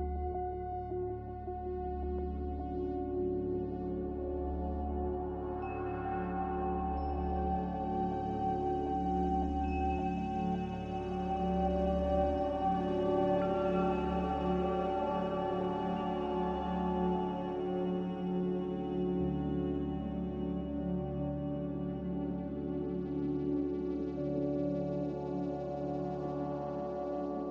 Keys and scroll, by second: 13.5 z, 15.1-17.4 typing, 20.3-22.0 typing, 23.5 z.